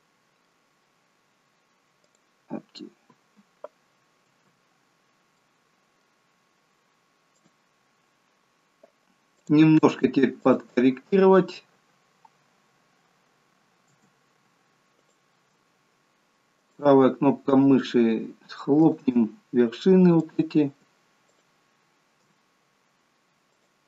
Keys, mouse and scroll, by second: 2.1 click, 4.6 Tab, 5.0 scroll up 2, 5.4 middle click, 7.4 click, 9.5 click.